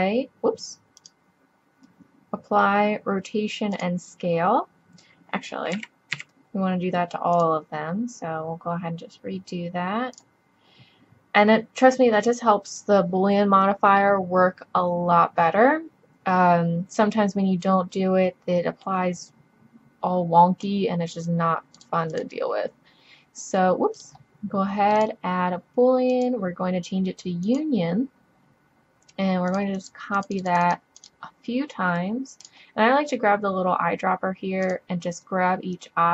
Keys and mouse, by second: 5.8 a, 6.2 a, 12.7-14.7 middle drag, 17.0-18.8 drag, 20.7-25.7 drag, 25.7-26.1 middle drag, 26.1-27.9 drag, 30.3 click, 34.0 click.